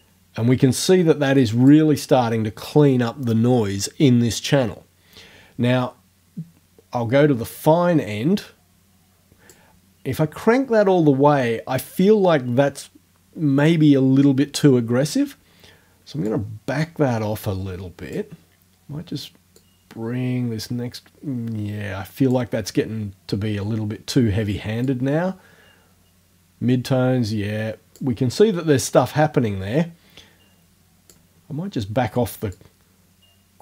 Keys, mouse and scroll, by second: 7.6-9.7 drag, 16.3-18.3 drag, 19.6-22.5 drag, 24.9-28.1 drag, 29.0-31.3 drag, 32.6-33.6 drag.